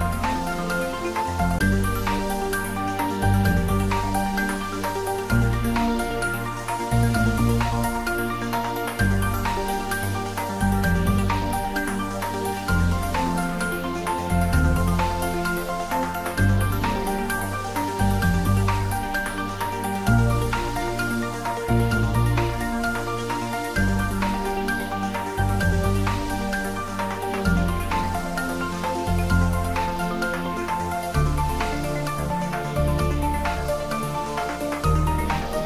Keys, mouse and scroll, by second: 3.1 click, 6.8 click, 15.4-19.4 drag, 35.0 click.